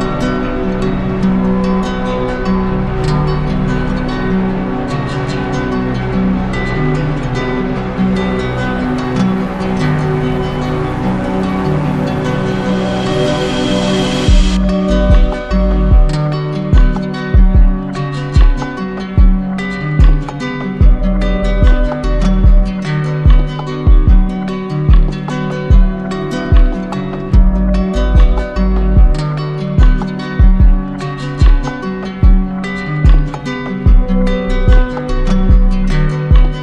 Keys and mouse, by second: 2.9 shift+click, 3.3 ctrl+z, 5.5 alt+right click, 8.6 z, 10.7 right click, 11.7 click, 11.9 q, 13.4 alt+click, 17.1 click, 17.9 alt+click, 19.5 click, 21.5 click, 22.1 alt+right click, 22.9 right click, 24.3 right click, 24.6 d, 24.8 d, 25.6 d, 27.7-28.9 alt+drag, 29.1-30.3 right drag, 31.1-32.2 drag, 32.4-33.6 right drag, 34.5-35.6 drag, 36.1-36.6 drag.